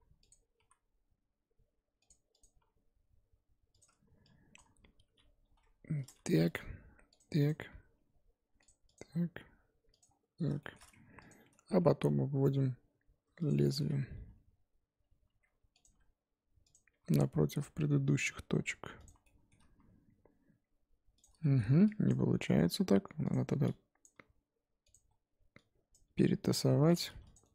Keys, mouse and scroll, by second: 0.3 click, 0.6 e, 2.4 click, 2.6 e, 4.6 shift+click, 5.0 f, 6.1 click, 6.5 click, 6.6 g, 7.5 click, 7.7 g, 8.9 click, 9.1 g, 10.6 shift+middle click, 11.3 click, 11.8 e, 14.1 g, 15.9 e, 16.9 e, 19.2 shift+middle click, 19.8 e, 21.4 shift+middle click, 22.1 click, 22.3 g, 24.0 click, 24.1 g, 25.9 click, 26.0 g, 27.1 2, 27.3 click, 27.4 right click.